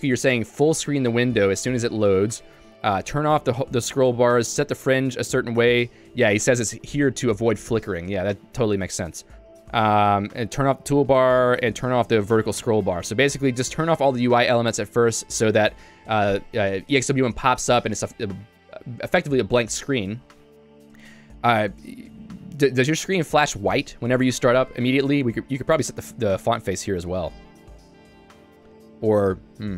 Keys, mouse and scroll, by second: 0.0 shift+v, 2.3 Escape, 2.5-5.1 typing, 3.6 Escape, 5.6 Escape, 9.2 j, 10.4 shift+v, 11.2 Escape, 11.5 j, 11.9 shift+v, 12.6 Escape, 13.0 k, 20.7 Escape, 21.1 j, 28.3 Escape.